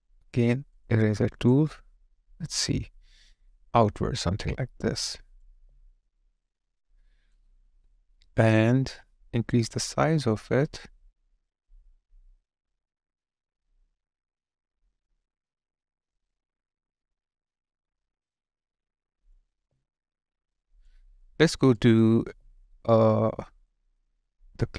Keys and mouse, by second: 1.3 ctrl+z, 1.5 alt+click, 19.6 alt+click.